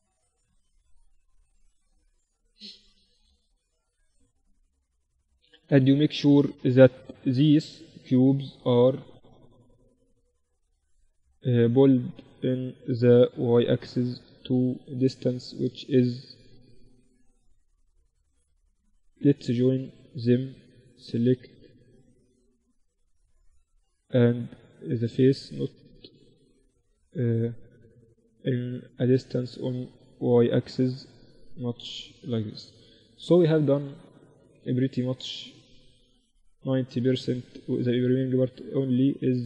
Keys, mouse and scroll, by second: 0.2-2.1 right drag, 1.1-2.7 drag, 2.1 z, 2.7 z, 5.5-8.2 right drag, 7.5 KP_7, 8.2 click, 9.5 Tab, 11.1 Tab, 12.1-13.9 drag, 13.6 z, 16.9 Tab, 18.5 ctrl+j, 19.5 Tab, 19.9-21.7 right drag, 21.2 Tab, 21.8 Tab, 22.3 Tab, 22.9-25.7 drag, 23.4-25.0 right drag, 25.7 Tab, 26.1 Tab, 27.7-29.5 drag, 27.7-28.9 right drag, 29.1 Tab, 29.3 right click, 29.5 Tab, 30.4 click, 30.4 right click, 31.5 Tab, 31.9 z, 33.9 KP_1, 34.2 z, 35.1 z, 36.9-38.2 right drag, 37.1 Tab.